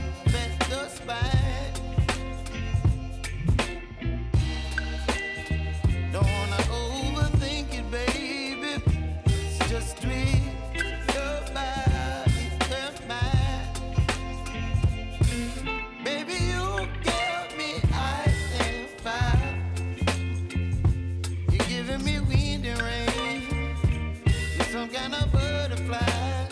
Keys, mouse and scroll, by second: 0.0-0.3 typing, 0.7 click, 1.6-2.4 typing, 3.4 r, 4.4-13.1 drag, 13.1-15.1 drag, 16.5 space, 18.1 s, 20.1 click, 21.1-21.7 typing, 22.2 click, 22.7 ctrl+click.